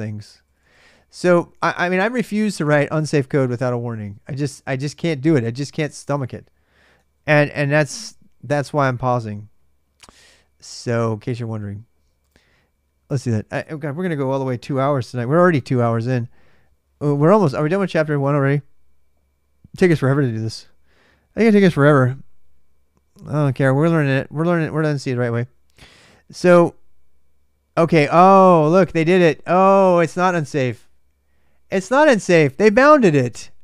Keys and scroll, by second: 0.0-2.9 typing, 6.9 ctrl+a, 7.1 ctrl+a, 8.0 super+Tab, 8.0 ctrl+a, 8.3 super+Tab, 15.6 super+Tab, 17.5 super+Tab.